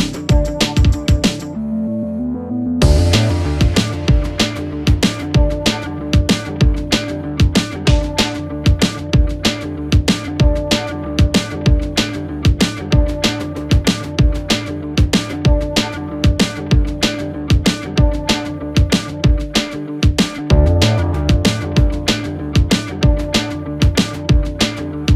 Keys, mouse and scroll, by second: 2.8-3.9 alt+scroll down 1, 4.2-4.8 alt+scroll up 1, 5.7 click, 7.8 ctrl+t, 8.4 alt+scroll down 1, 9.1-12.8 drag, 10.1-12.0 alt+shift+drag, 13.0-16.8 shift+drag.